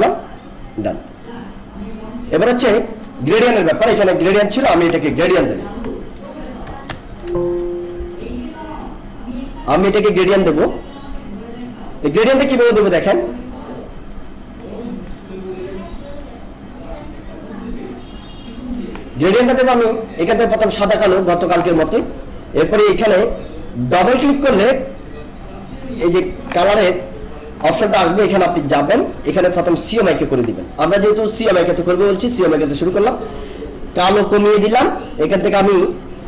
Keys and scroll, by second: 5.2 ctrl+-, 7.0 alt+space.